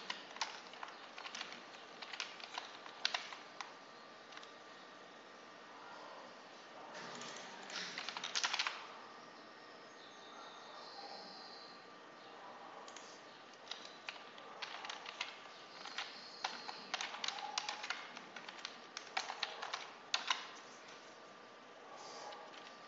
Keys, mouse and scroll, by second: 0.0-2.9 typing, 5.2 scroll down 2, 6.0 scroll down 2, 7.1 click, 7.6-9.0 typing, 10.9-11.6 scroll down 2, 12.8 click, 13.6 Return, 14.3-20.6 typing, 22.4 Left.